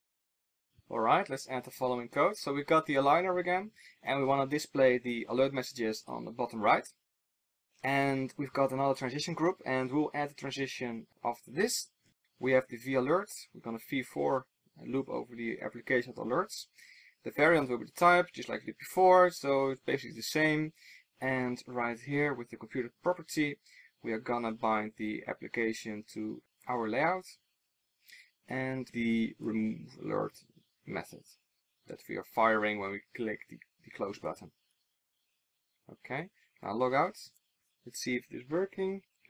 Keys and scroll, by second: 28.8 super+s, 29.1 super+s.